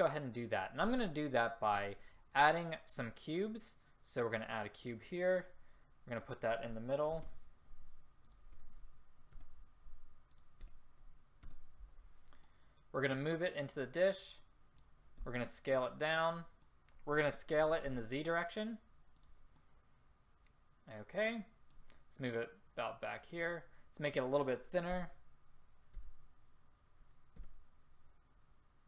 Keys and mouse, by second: 12.5-13.4 middle drag, 13.4-14.2 right drag, 14.5 middle click, 15.3 s, 17.7 s, 25.0 s.